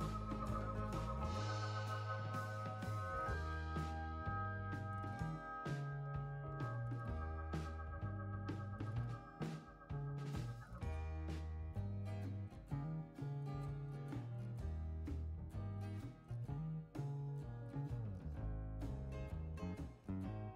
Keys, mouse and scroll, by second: 6.1 click, 12.4 click, 13.9 space, 17.2 click, 18.7 click.